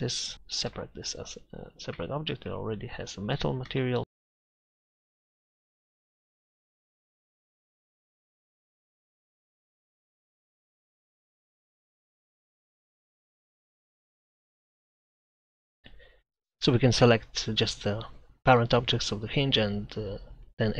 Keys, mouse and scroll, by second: 0.7 p, 2.0 Tab, 2.4 right click, 3.3-4.2 middle drag, 4.5 Tab, 5.2 z, 5.3 Tab, 5.4 Tab, 5.4 z, 6.4 middle click, 6.8 click, 7.4 middle click, 8.8 click, 9.1 a, 9.2 a, 9.3 e, 9.9 click, 10.5 click, 10.8 Tab, 10.9 click, 11.7 Tab, 11.9 click, 12.2 Tab, 12.5 Tab, 13.0 Tab, 13.5 a, 14.1 Tab.